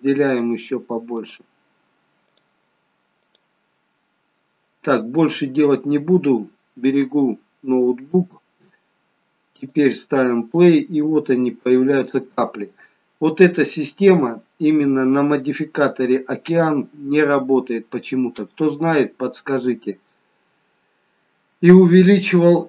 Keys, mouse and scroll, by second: 0.3 click, 2.3 click, 7.9 Tab, 9.6 click, 16.7 click, 17.4-18.1 scroll up 2, 18.1 middle click, 19.4-21.0 scroll down 2.